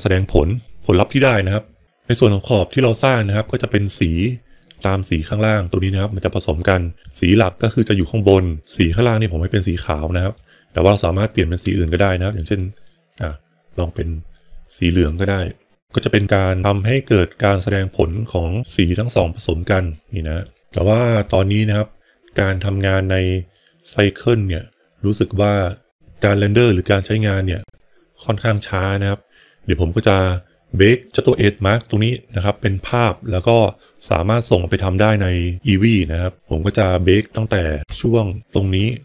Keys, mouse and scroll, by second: 7.0-8.2 drag, 10.1 click, 35.9 middle click, 36.4 middle click, 38.2 ctrl+shift+click.